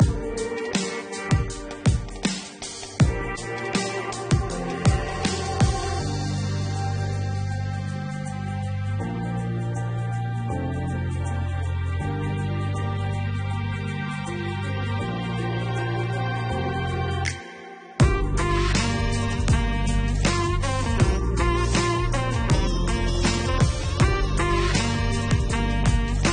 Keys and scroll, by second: 9.1 3.